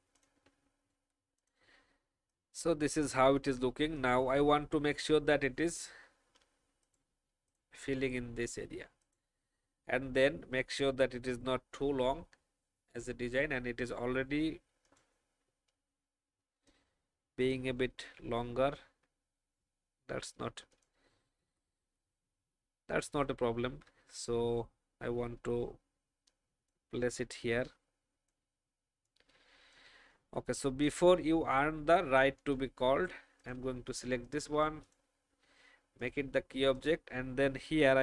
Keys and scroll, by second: 18.4 alt+shift+Up, 18.9 alt+shift+Up, 21.3 shift+Up, 22.0 shift+Up.